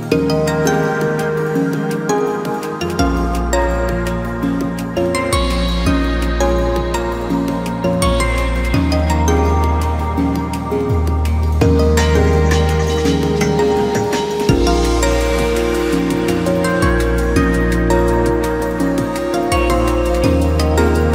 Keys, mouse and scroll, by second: 3.0-3.4 scroll down 3, 3.4 KP_1, 4.0-4.3 scroll up 2, 4.3 scroll down 1, 4.9 s, 7.3-7.9 drag, 7.9-8.2 scroll up 1, 8.2 scroll down 1, 8.4 s, 11.8 e, 12.1 s, 14.6 e, 14.8 s, 19.3-19.8 scroll down 2, 19.8 e.